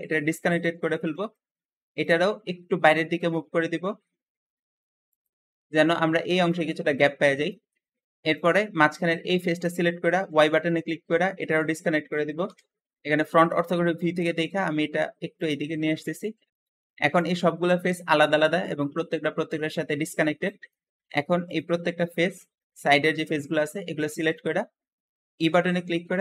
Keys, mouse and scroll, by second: 0.8-2.1 shift+middle drag, 2.1-2.7 scroll up 1, 2.7 g, 6.8 Escape, 7.0-7.4 scroll down 1, 7.4 shift+middle click, 8.0 shift+click, 9.3-9.6 scroll up 1, 10.3 y, 10.4 y, 12.3 KP_1, 12.5 1, 13.1 scroll up 1, 13.9 g, 14.0 g, 16.0 scroll down 1, 16.5 Escape, 16.5 click, 17.0 click, 17.7 click, 18.5 click, 20.3 middle click, 20.8 scroll up 2, 21.4 shift+click, 21.9 shift+click, 22.3-23.6 shift+middle drag, 23.6 scroll down 1, 24.0 shift+middle click, 24.5-25.0 scroll up 1, 25.4 e.